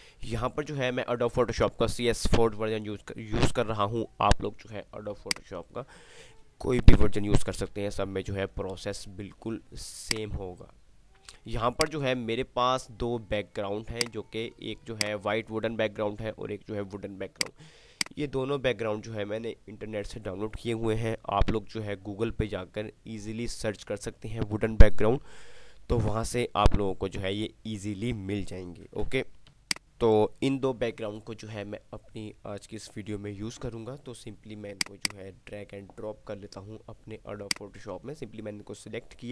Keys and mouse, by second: 5.4 click, 10.3 click, 17.3-19.8 drag, 29.4 ctrl+Num_Lock, 29.6 click, 34.9-36.6 drag.